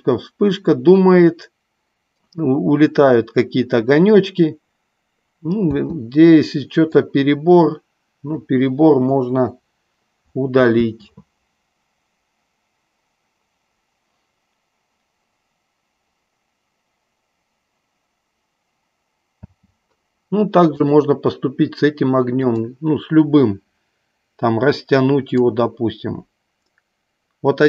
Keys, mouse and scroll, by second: 6.0 space, 7.1 click, 9.1 Delete, 10.9 space, 19.8 space, 20.9 click, 22.4-23.0 drag, 25.4-27.6 drag.